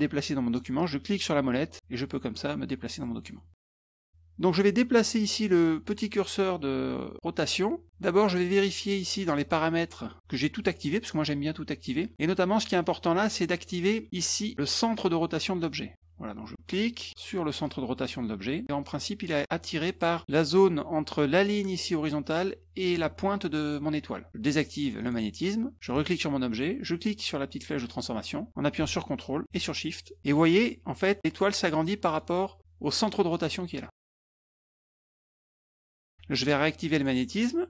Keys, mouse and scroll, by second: 1.2-3.0 middle drag, 4.0 middle drag, 8.4 click, 16.7 click, 17.6-20.0 drag, 25.0 click, 25.9 click, 28.0-28.9 drag, 30.2 ctrl+shift+click, 32.1 ctrl+shift+click, 33.9-35.8 ctrl+shift+drag, 36.9 click.